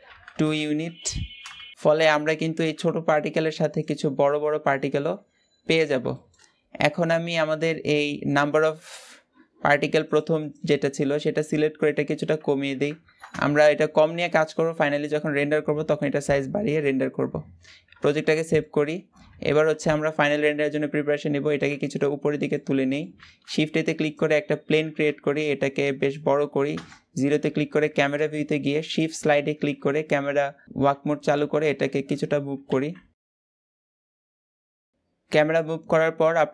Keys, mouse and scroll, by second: 5.1-5.4 scroll down 2, 5.4-10.1 middle drag, 10.1 click, 13.1 KP_0, 14.2-16.4 middle drag, 16.4-17.7 scroll up 2, 17.7-18.2 scroll down 4, 18.2-19.1 shift+middle drag, 19.1 g, 21.5-22.9 middle drag, 22.9 shift+a, 24.1-24.6 scroll down 4, 24.6 s, 26.5 KP_0, 27.7 shift+`, 36.2 click.